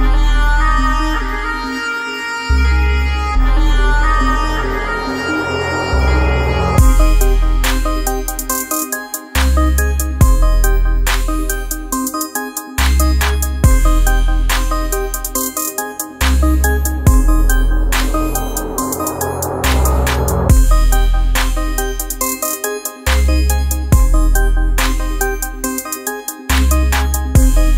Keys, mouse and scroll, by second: 1.4-4.9 drag, 8.6-12.8 drag, 16.8 space, 16.9-19.5 ctrl+drag, 19.5 ctrl+space, 20.2 click, 20.7 space, 22.1-23.6 drag, 23.6 space, 23.8 click, 24.1 space, 25.2 click, 26.9 alt+scroll down 1, 27.2 space, 27.4 click.